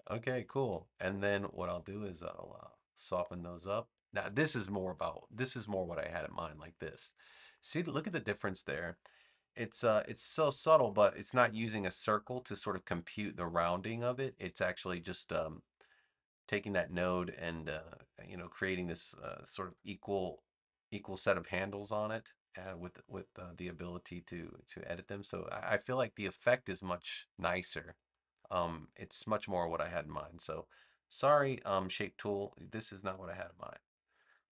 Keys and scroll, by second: 19.6 a, 33.6 BackSpace.